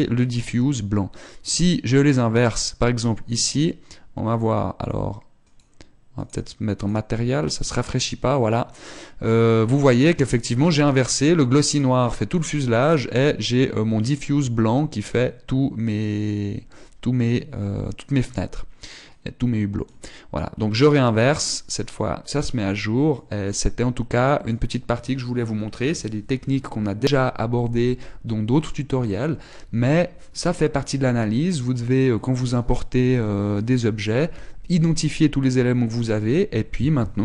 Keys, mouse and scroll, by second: 3.2 click, 4.9 click, 6.8 click, 9.1 scroll down 1, 21.5 click, 22.2-22.7 scroll down 2, 23.8 click.